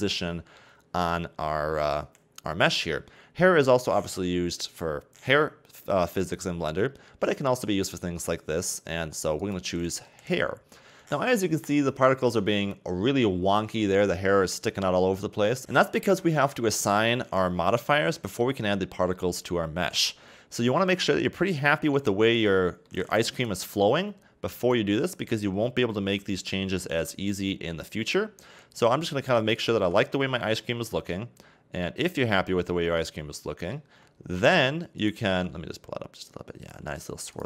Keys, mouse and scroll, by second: 2.5-5.5 scroll up 1, 9.4 click, 10.6-11.0 scroll down 3, 11.0 click, 12.0-15.1 middle drag, 15.6-15.9 scroll down 2, 17.4-18.1 scroll down 1, 18.1-23.4 middle drag, 23.4 right click, 24.6 click, 25.3 Tab, 26.4 right click, 27.0 g, 29.8 a, 30.0 Tab, 30.4 scroll down 2, 30.6-33.7 middle drag, 34.0-34.4 scroll up 3, 34.4 Tab, 35.0 right click, 35.3 g, 37.1 r.